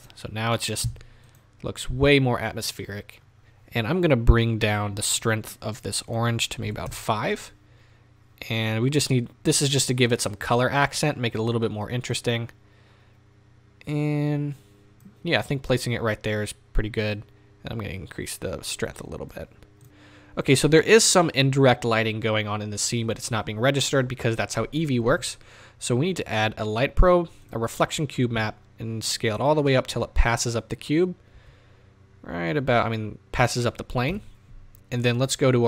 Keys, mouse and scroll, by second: 1.7 scroll up 1, 2.8-3.3 scroll down 1, 3.3 scroll up 1, 5.3 click, 6.9-19.8 drag, 7.0 KP_Enter, 8.8-12.1 scroll down 1, 15.5-17.2 scroll up 2, 28.4 s, 29.5 click, 29.7-30.1 middle drag, 30.1 scroll down 2, 30.1-33.6 middle drag, 31.3 s, 33.6 click, 34.1 KP_0.